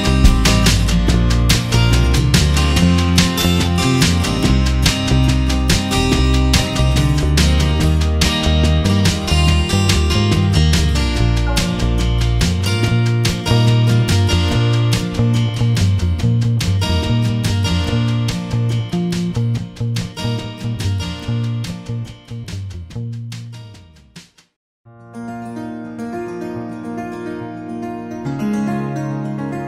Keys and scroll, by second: 0.1 Left, 0.6 Return, 1.5 ctrl+[, 3.5 F7, 4.7 w, 5.7 Delete, 5.7 Home, 6.9 space, 8.5 ctrl+d, 10.2 space, 11.7 space, 14.2 e, 16.3 space, 17.8 ], 23.2 v, 24.4 ctrl+t, 26.9 Return.